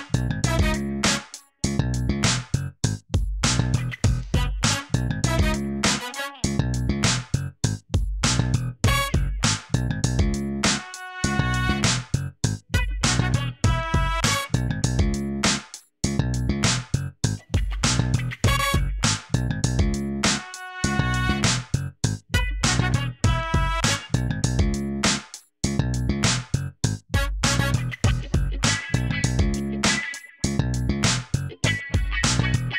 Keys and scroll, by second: 0.1 g, 0.6 z, 1.9 alt+a, 4.8 alt+a, 8.2 Tab, 9.3 Tab, 10.6 Tab, 11.2-12.8 typing, 14.5 g, 14.7 z, 15.7 s, 16.6 Tab, 18.0 ctrl+z, 18.6 Tab, 20.5 Tab, 21.1 g, 21.2 z, 22.6 Tab, 23.0 alt+a, 25.4 Tab, 27.4 s, 29.4 Tab, 29.9 alt+a.